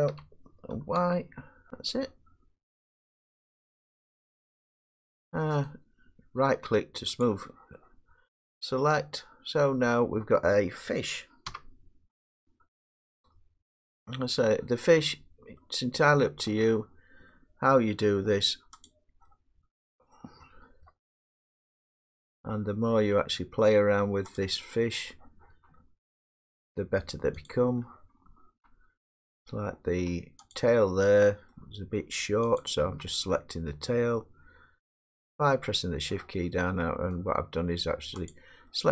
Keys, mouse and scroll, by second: 0.1-1.0 typing, 1.7 Tab, 1.7 click, 1.7 middle click, 5.2 middle click, 5.6 right click, 7.2 click, 10.1 middle click, 11.5 1, 13.9 middle click, 15.0 Tab, 16.5 middle click, 18.3 middle click, 18.8 click, 20.2 middle click, 20.4 middle click, 20.9-22.0 middle click, 20.9-21.6 scroll down 7, 22.1 middle click, 23.9 middle click, 24.4 click, 26.1 middle click, 27.5 shift+click, 29.2 middle click, 30.5 ctrl+click, 31.5 middle click, 32.6 ctrl+click, 35.9 middle click, 37.1 middle click, 38.6 click.